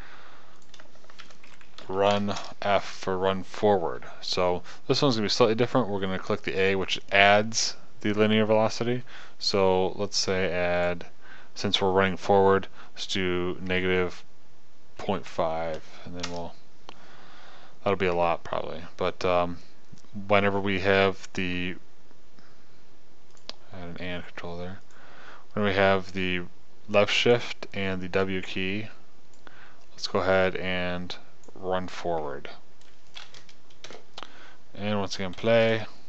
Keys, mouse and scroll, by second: 7.3-10.6 scroll, 23.8-25.6 drag, 26.6-28.1 drag, 28.3 click, 28.8-30.1 drag, 34.4 KP_0, 35.9 p.